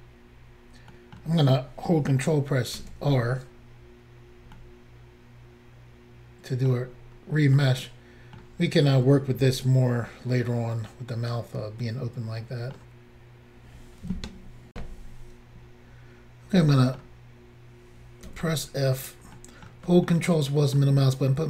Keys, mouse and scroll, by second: 0.9 middle click, 2.8 ctrl+r, 4.5 middle click, 7.0-7.5 scroll down 1, 7.5 middle click, 9.4 middle click, 14.7 Insert, 16.7 middle click, 18.3 f, 19.0 click, 19.1 click, 19.4 middle click, 20.1 ctrl+middle click.